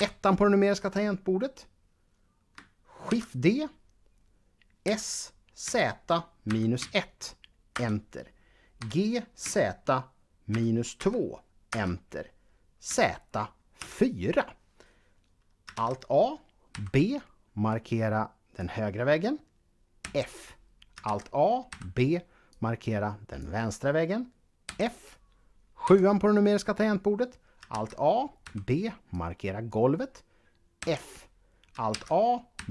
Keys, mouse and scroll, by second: 2.9 shift+d, 4.6 s, 6.3 typing, 7.7 Return, 8.7 g, 9.3 z, 10.3 -, 10.8 2, 11.6 Return, 12.7 z, 13.6 4, 15.6 alt+a, 16.5 b, 17.5 click, 19.9 f, 20.9 a, 21.5 b, 22.3 click, 24.4 f, 25.7 KP_7, 27.5 alt+a, 28.2 b, 28.9 click, 30.6 f, 31.8 a, 32.3 b.